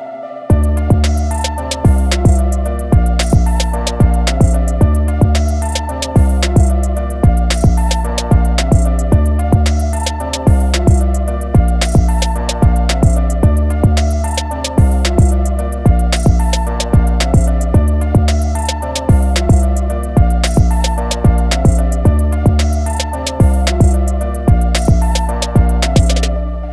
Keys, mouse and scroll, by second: 2.1 click, 8.6 scroll down 2, 9.2 alt+scroll up 2, 10.7 click, 14.1 alt+scroll down 1, 14.6 alt+scroll up 2, 15.3 scroll down 1, 16.6 click, 26.2 alt+scroll down 1.